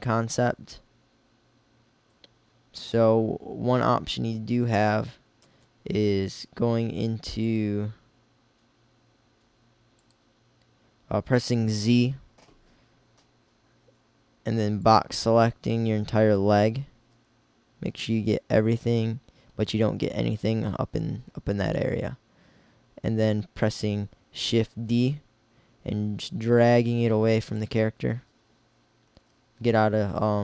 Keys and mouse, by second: 5.5 z, 14.1 b, 18.0 b, 24.8 shift+d, 28.7 x, 30.1 z.